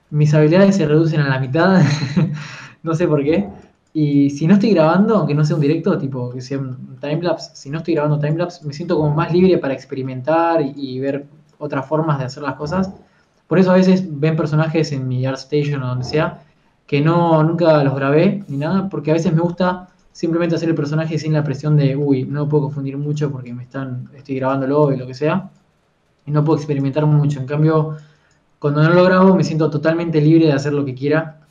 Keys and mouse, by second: 2.2 f, 4.0 f, 8.3 f, 8.5-11.4 drag, 11.4 f, 11.6 f, 13.4 f, 13.6 f, 16.8 ctrl+z, 17.0 ctrl+z, 20.7 f, 20.9-22.9 drag, 23.7 f, 25.1 f, 27.4 f.